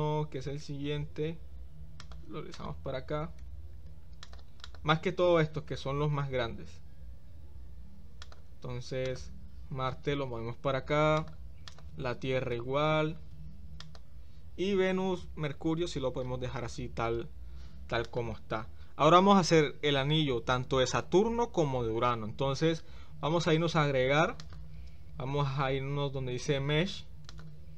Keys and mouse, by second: 0.5 g, 2.6 click, 9.0 click, 9.8 g, 11.6 click, 24.4-26.5 drag, 27.4-27.7 drag.